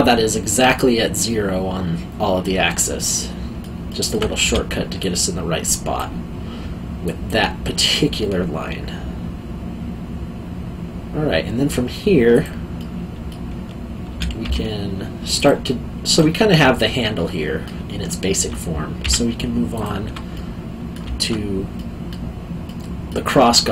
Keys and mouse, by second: 3.0 middle click, 4.4 3, 5.0 click, 12.3 click, 12.7 middle click, 14.1 3, 14.4 2, 15.3 click, 16.7 middle click, 19.0 2, 19.7 alt+click, 20.3 middle click, 21.7 middle click.